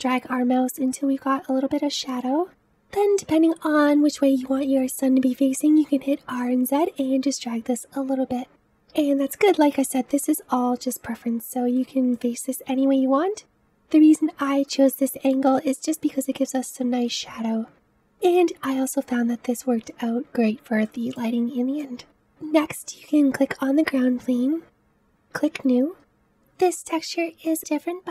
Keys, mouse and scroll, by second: 2.6 r, 8.7-9.3 middle drag, 9.3-9.8 scroll up 2, 9.8-13.7 shift+middle drag, 13.7-17.9 scroll up 3, 17.9-18.6 scroll down 2, 18.6-20.8 scroll down 1, 20.8-22.1 middle drag, 22.1 click, 24.6-26.2 drag, 26.2-28.1 shift+middle drag.